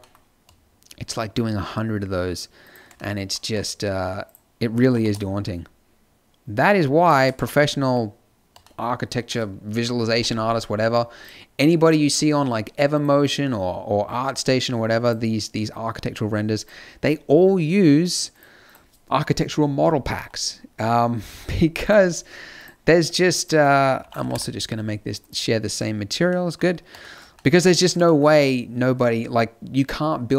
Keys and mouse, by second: 3.4 a, 4.7 click, 4.7 g, 7.3 a, 24.2 o, 25.4 middle click, 27.7 middle click.